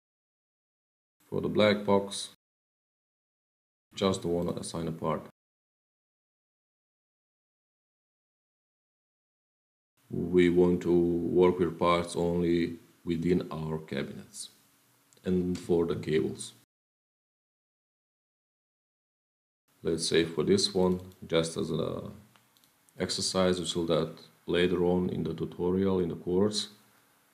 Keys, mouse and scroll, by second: 0.7 click, 1.0 click, 2.3 click, 3.0 click, 3.1 ctrl+v, 4.3 click, 5.3 click, 5.6-6.2 scroll, 7.6 click, 12.0 Page_Down, 19.8-20.4 scroll, 20.4 scroll, 20.7 click, 20.9 click, 22.4 click, 23.7 ctrl+v.